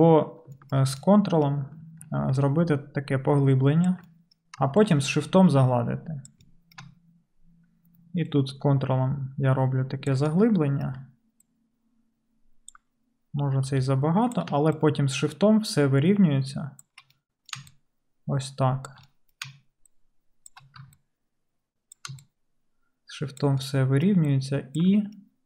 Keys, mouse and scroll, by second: 1.1-2.1 right drag, 2.1 ctrl+click, 2.4 ctrl+right click, 2.5-13.7 ctrl+middle drag, 13.7 f, 14.5-19.1 shift+drag, 14.8-25.4 shift+middle drag, 16.8-19.1 shift+right drag.